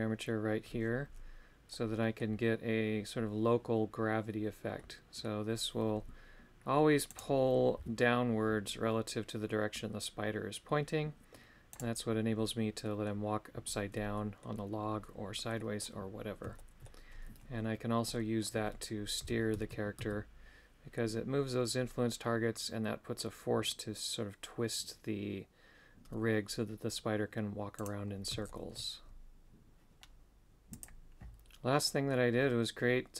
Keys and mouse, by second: 1.7 middle click, 4.8 middle click, 7.1 right click, 11.7 right click, 12.8 middle click, 14.1 middle click, 15.6 middle click, 16.6 shift+middle click, 18.1 middle click, 28.5 shift+middle click, 31.8 middle click.